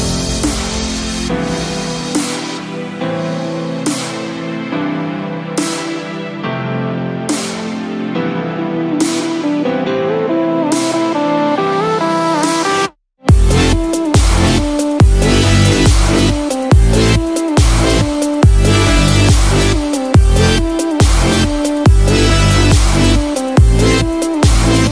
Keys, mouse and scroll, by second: 6.0 scroll up 2, 6.1-6.4 scroll down 1, 6.4 scroll up 2, 6.9 scroll down 1, 8.5 click, 14.1 scroll up 1.